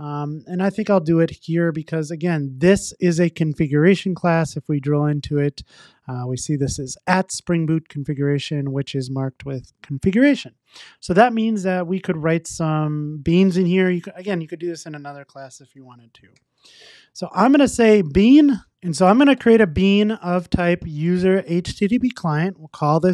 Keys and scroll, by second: 3.2 super+b, 7.8 super+b, 17.6 Return, 21.6 Return.